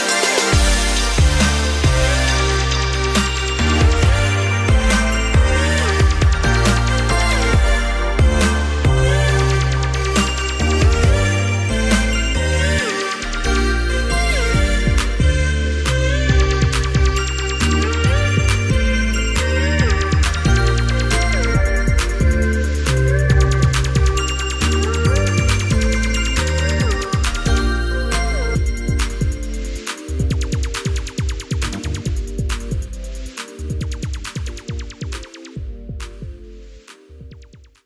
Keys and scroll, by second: 4.0 ctrl+=, 8.2 ctrl+c, 9.2 ctrl+c, 10.9 ctrl+f, 20.0 i, 29.0 ctrl+-, 29.2 ctrl+-, 31.4 ctrl+=.